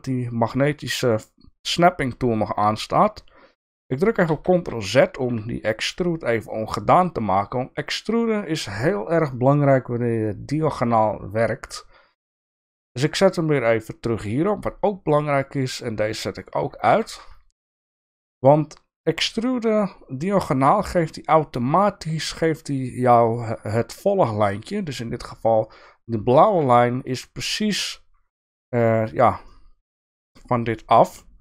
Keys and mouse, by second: 4.3 ctrl+z, 12.5-15.2 drag, 15.7 click, 16.9 e, 29.5 middle click, 30.8-31.4 middle drag.